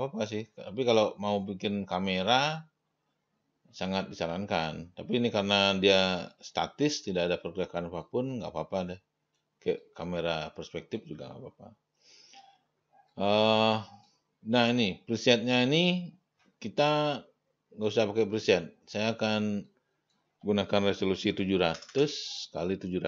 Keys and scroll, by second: 21.6 7, 22.0 0.